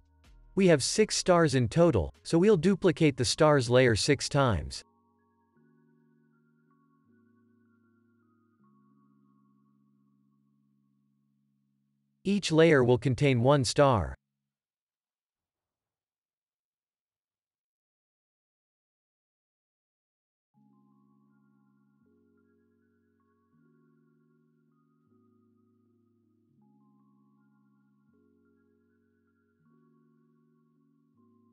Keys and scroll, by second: 5.8 ctrl+d, 9.8 ctrl+d, 12.0 Delete, 16.9 Delete.